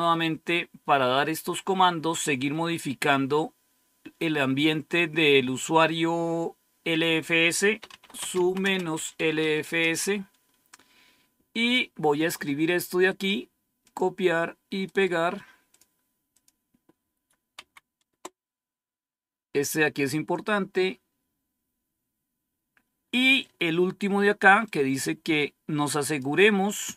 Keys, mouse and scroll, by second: 6.8 click, 7.6-9.8 typing, 13.0 right click, 13.8 click, 13.8 right click, 15.0 right click, 15.6 click, 17.5 End, 17.7 Down, 18.0 Return, 20.0-20.6 scroll down 1, 20.6-20.9 scroll down 1, 24.6-26.1 drag.